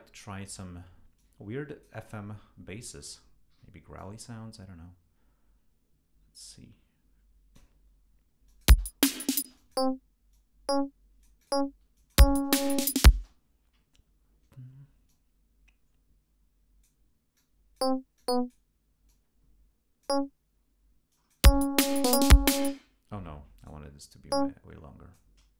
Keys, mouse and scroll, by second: 1.2 click, 3.6 d, 4.0-7.8 drag, 8.5 click, 8.7 space, 9.0 ctrl+scroll up 2, 9.5 ctrl+space, 9.6 ctrl+click, 10.3-11.7 drag, 12.0 click, 12.2 space, 12.8 ctrl+scroll down 2, 13.2 ctrl+space, 14.2 ctrl+scroll up 2, 15.1-17.1 drag, 17.4 click, 18.2 click, 19.1-20.3 drag, 21.2 click, 21.5 space, 21.7 ctrl+scroll down 2, 22.7 space, 23.0 ctrl+scroll up 2, 23.6 ctrl+shift+right click, 24.3-25.4 shift+drag.